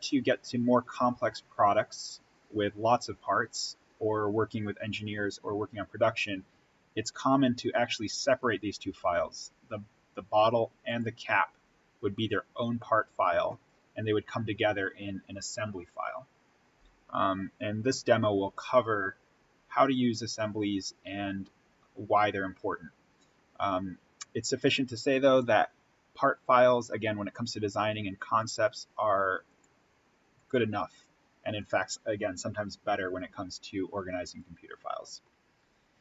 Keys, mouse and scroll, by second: 8.0 click, 10.8 click, 29.4 click, 33.7-34.2 scroll up 1, 34.2 click.